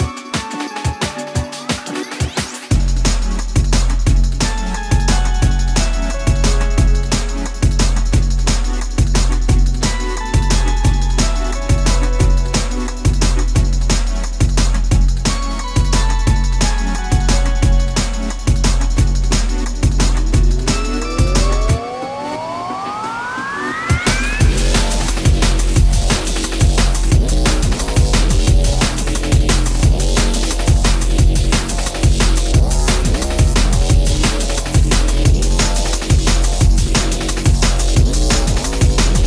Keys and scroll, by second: 20.2 space, 25.6 alt+t, 30.2 space, 34.8 shift+q.